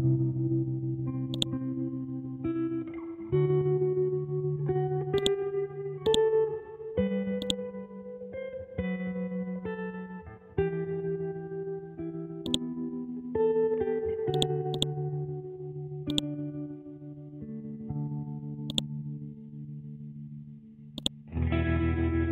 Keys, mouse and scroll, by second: 2.6 t, 3.9 l, 5.1-8.6 drag, 8.6-8.9 scroll up 1, 9.3-9.9 scroll down 1, 9.9-10.3 scroll up 1, 11.7-12.4 scroll down 1, 12.4-14.3 drag, 18.7 click, 19.7-20.9 scroll up 1, 20.9-22.3 drag.